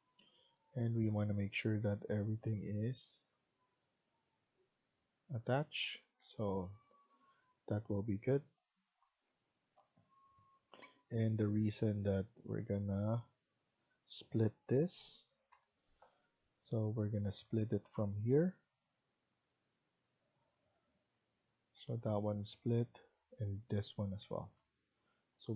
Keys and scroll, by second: 6.1 Escape, 15.4-16.0 typing, 24.0 Escape, 24.2 Escape, 24.5 Escape.